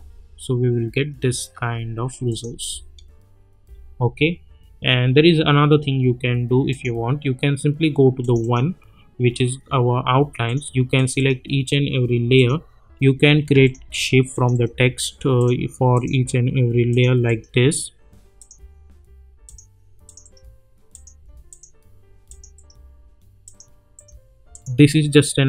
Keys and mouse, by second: 2.3 click, 2.4 space, 6.7 click, 11.2 right click, 12.3 click, 14.5 right click, 15.4 click, 17.2 right click, 18.4 click, 20.2 right click, 20.9 click, 22.5 right click, 23.4 click.